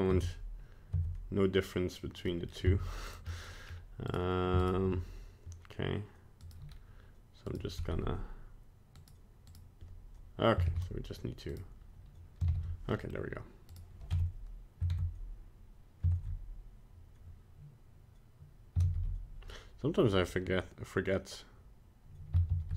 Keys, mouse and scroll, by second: 0.2 Tab, 1.0 Tab, 2.3 middle click, 2.6 z, 3.3 middle click, 3.7 scroll up 1, 4.1 right click, 4.6 shift+right click, 6.4 right click, 7.5 right click, 9.0 right click, 9.5 right click, 10.6 ctrl+c, 11.5 right click, 12.5 ctrl+v, 12.9 middle click, 13.1 middle click, 13.7 right click, 14.1 Tab, 14.9 ctrl+Tab, 16.1 ctrl+Tab, 18.8 shift+a, 22.5 shift+z.